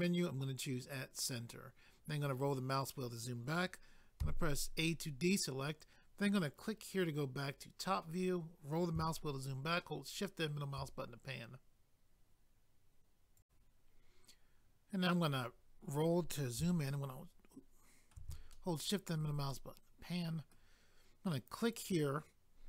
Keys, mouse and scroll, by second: 0.8 click, 1.0 click, 1.9 scroll down 1, 6.5 click, 6.6 click, 7.4 scroll down 1, 9.8 shift+middle click, 13.4 click, 13.4 click, 15.0-15.5 scroll up 1, 16.9 shift+middle click, 18.5 shift+middle click, 19.5 middle click, 21.6 click, 21.7 click.